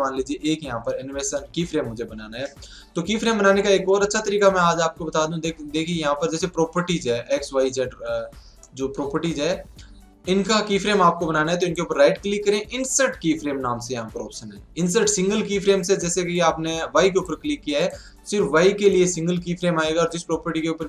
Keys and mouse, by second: 4.1 middle click, 4.4-8.4 drag, 8.6-11.6 middle drag, 11.6-13.3 right drag, 17.8-19.8 drag.